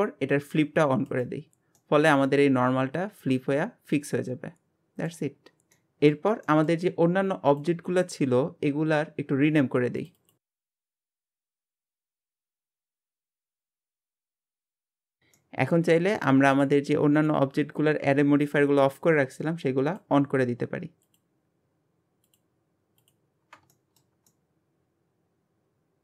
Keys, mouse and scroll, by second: 1.1 click, 1.8-4.8 middle drag, 5.3 scroll down 1, 5.7-7.5 middle drag, 7.5 click, 10.0 click, 10.2 click, 12.0 click, 12.2 click, 14.0 click, 14.3 click, 15.4-17.2 middle drag, 17.2 click, 19.9 click, 21.0 click, 22.3 click, 23.0 click, 23.7-26.0 shift+middle drag.